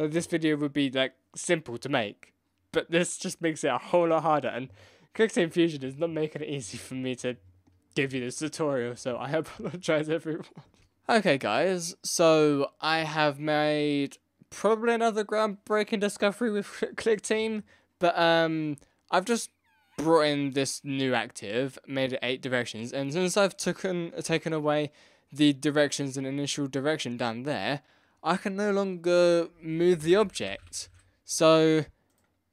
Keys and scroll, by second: 29.5 Down, 29.6 Left, 29.6 Right, 29.7 Down, 29.7 Right, 29.8 Left, 30.0 Down, 30.0 Right, 30.2 Up, 30.2 Down, 30.3 Left, 30.6 Left, 30.7 Down, 30.9 Left.